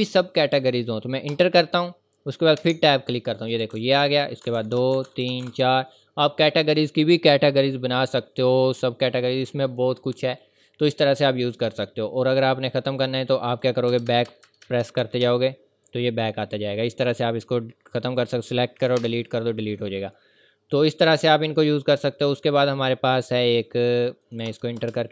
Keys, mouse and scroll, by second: 1.3 click, 1.3 Return, 2.6 Tab, 3.6-5.9 typing, 7.4-8.1 typing, 9.1-11.3 scroll up 1, 12.0 scroll up 1, 13.5 click, 13.9 BackSpace, 16.5-17.1 scroll up 1, 17.1-17.6 scroll down 1, 17.9 click, 19.0 BackSpace, 20.3-20.7 scroll down 1, 20.7-21.1 scroll up 1, 22.4-24.2 scroll down 1, 24.2 click, 24.5 Return.